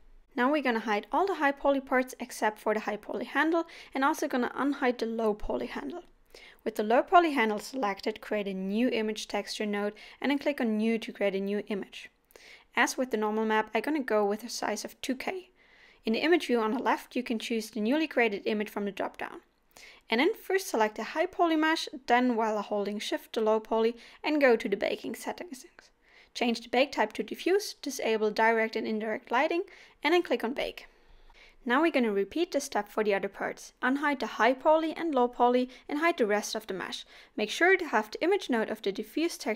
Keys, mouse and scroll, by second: 0.0 click, 7.2 scroll down 1, 7.5 middle click, 8.1 shift+a, 10.0 scroll up 2, 10.4 middle click, 11.3 middle click, 11.7 click, 14.8 scroll up 2, 15.4 middle click, 33.1 scroll up 5, 33.3-33.6 scroll down 5, 38.5 shift+click.